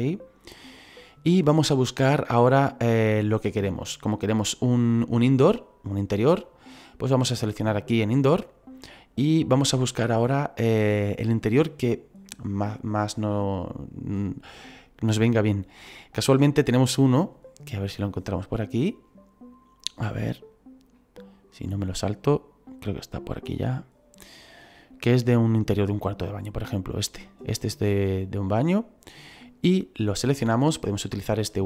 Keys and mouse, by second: 8.0 click, 29.4 click.